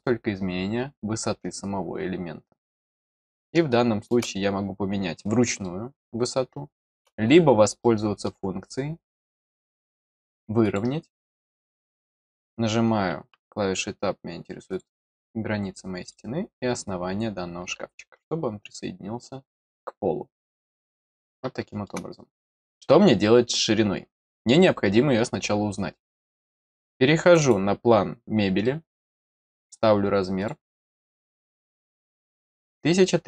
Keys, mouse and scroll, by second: 3.7 middle click, 5.6-6.9 middle drag, 7.2-7.6 scroll up 2, 7.8 middle click, 10.6 click, 14.7 click, 16.0 click, 16.8-18.2 scroll down 2, 18.2-19.6 middle drag, 20.5 middle click, 21.2 middle click, 27.2 click, 27.4 click, 28.6 middle click, 29.6 click, 30.3 click, 31.2 click, 31.9 click.